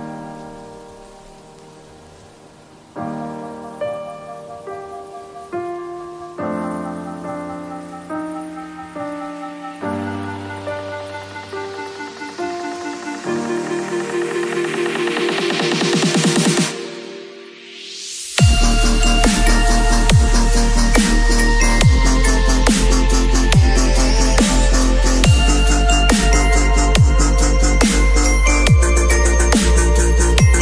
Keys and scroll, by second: 12.3 b, 16.7 ], 24.3 v, 27.3 ctrl+l.